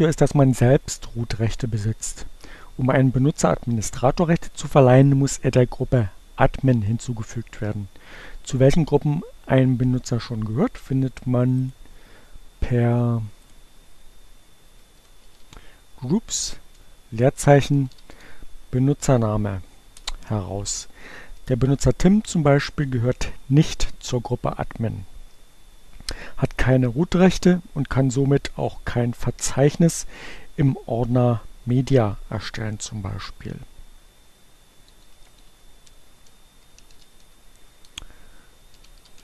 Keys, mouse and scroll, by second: 10.6-12.2 drag, 13.3 click, 14.2-16.0 typing, 17.5-18.5 typing, 18.6 Return, 33.5-37.2 typing, 38.2-39.1 typing.